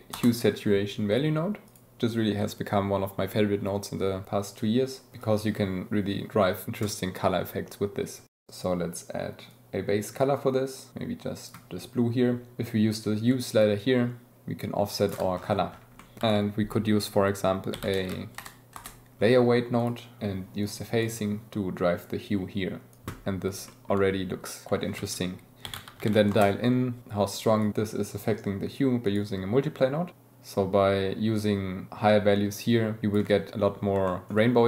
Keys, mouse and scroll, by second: 1.7 click, 5.2-6.3 drag, 8.2 click, 13.4-15.1 shift+middle drag, 16.0 middle click, 16.4 shift+a, 19.8 middle click, 20.6-22.3 middle drag, 23.7 shift+middle drag, 25.0 shift+a, 27.3 click, 30.1-33.2 shift+drag, 34.3 shift+middle click.